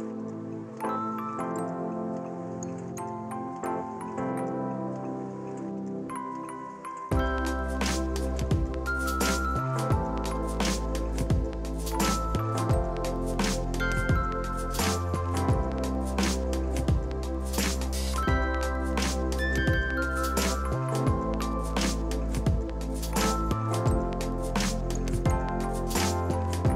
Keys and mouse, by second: 6.4 KP_8, 6.5 Return, 7.1 click, 16.4 right click, 16.7 click, 18.1 right click, 18.3 click, 18.5-19.4 typing, 19.7 click, 21.5 v, 21.8 click.